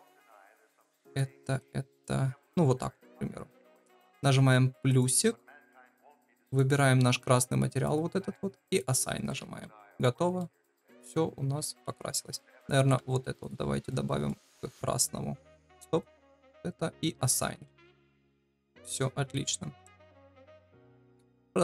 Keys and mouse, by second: 4.8 click, 6.5-7.8 drag, 10.3-11.6 middle drag, 11.8 Tab, 12.4 3, 12.5 click, 13.8 middle click, 15.5 ctrl+z, 17.1 click, 17.7 Tab, 18.3-18.9 middle drag.